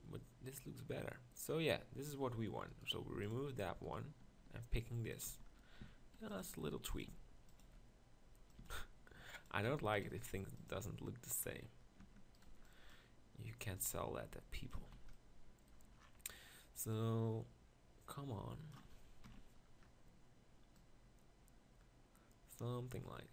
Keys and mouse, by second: 1.1-2.7 drag, 3.0 x, 4.4-8.6 typing, 9.8 g, 10.0 s, 10.7 g, 12.0 Tab, 12.5 b, 14.8 Tab, 15.0 z, 19.3 ctrl+KP_Decimal.